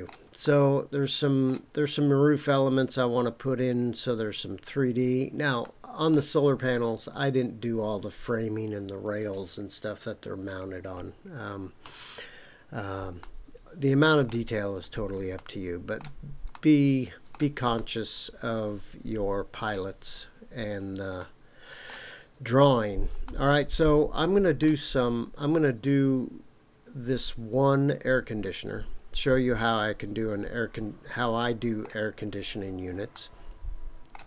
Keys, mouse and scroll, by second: 0.4-1.5 shift+middle drag, 5.6-6.1 shift+middle drag, 13.2-14.3 shift+middle drag, 14.6-15.3 scroll down 2, 15.3-16.0 shift+middle drag, 16.5-17.3 shift+middle drag, 17.7-19.7 middle drag, 21.2-21.9 shift+middle drag, 22.2 scroll up 3, 23.2-24.6 middle drag, 29.7-31.8 middle drag, 33.1-34.2 shift+middle drag.